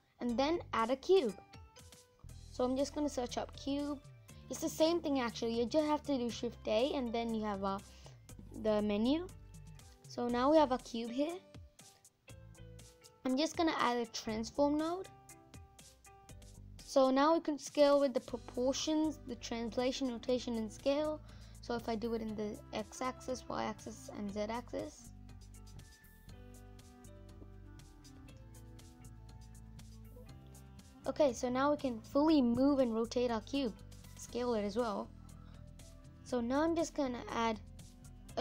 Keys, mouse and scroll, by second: 6.5 click, 8.2-9.0 scroll up 7, 9.0-16.5 middle drag, 20.2-26.7 drag, 26.7 ctrl+z, 27.1 ctrl+z, 27.7 ctrl+z, 29.0 scroll down 3, 29.3-38.4 middle drag.